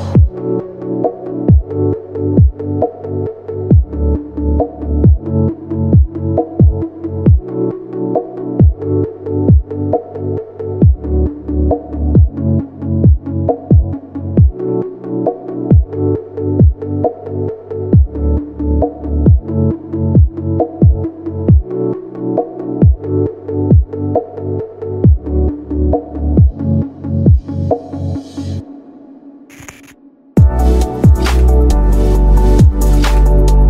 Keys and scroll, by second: 4.8 ctrl+Page_Down, 6.7 F3, 13.1 ctrl+v, 14.1 F3, 14.8 ctrl+q, 19.5 shift+F2, 20.6 ctrl+u, 20.9 Escape, 24.9 ctrl+g, 28.2 F10.